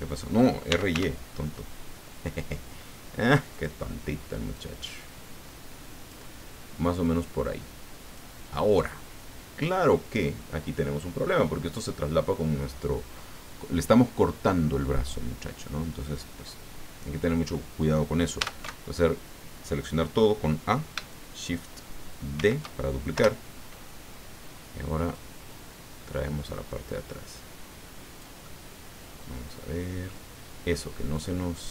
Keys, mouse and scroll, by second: 0.7 r, 0.9 y, 3.5 click, 4.5-6.3 drag, 7.0-8.3 drag, 8.5 middle click, 9.4 click, 18.4 a, 22.4 shift+d, 23.1 Return, 25.1-28.4 drag, 28.6-30.2 middle drag, 30.7 middle click.